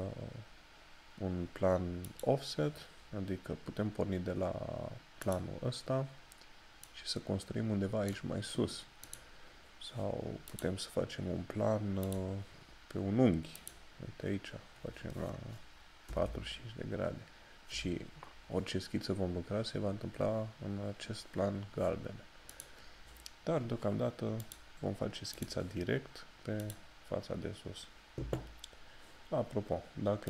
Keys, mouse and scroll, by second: 2.1 click, 5.4 click, 22.6 click.